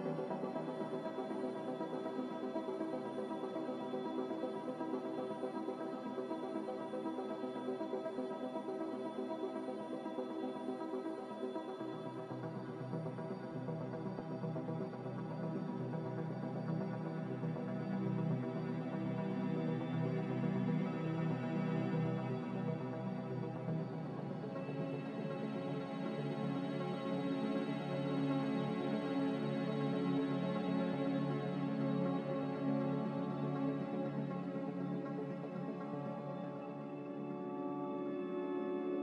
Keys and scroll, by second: 0.5 b, 1.8 Delete, 3.3 Delete, 4.2 z, 5.6 typing, 6.2 Return, 7.6 m, 33.0 Delete, 33.0 m.